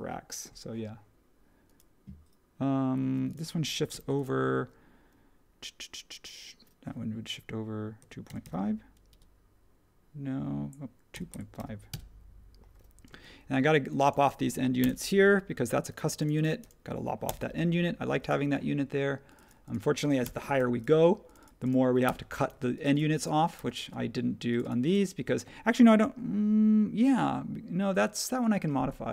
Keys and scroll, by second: 3.9 m, 7.7-8.9 typing, 9.1 Return, 10.9-13.0 typing, 14.8 BackSpace, 17.2 BackSpace, 20.2 BackSpace, 22.0 BackSpace, 23.5 BackSpace.